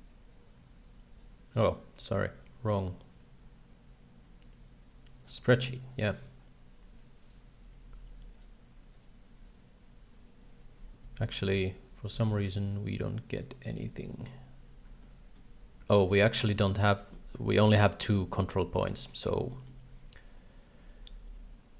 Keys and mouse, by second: 0.1-1.3 drag, 1.7-2.1 drag, 3.2-5.3 drag, 6.9 click, 7.3 click, 8.3 click, 8.9 click, 11.4 ctrl+shift+click, 11.7 ctrl+shift+click, 12.6 click, 13.1 click, 15.0 shift+middle click, 15.9 shift+middle drag, 16.9 shift+middle click, 17.5 shift+middle click, 19.1 shift+middle click, 19.5 shift+middle click.